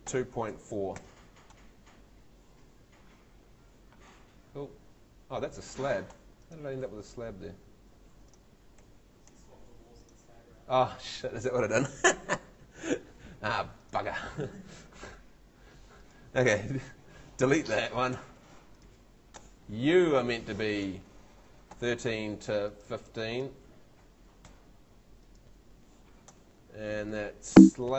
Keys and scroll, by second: 0.0-1.5 typing, 5.5 Escape, 8.8 Escape, 14.5 `, 15.0 Escape, 17.5 BackSpace, 21.5-22.4 typing, 24.0 i, 24.5 5, 26.7 Tab, 27.5 ↺.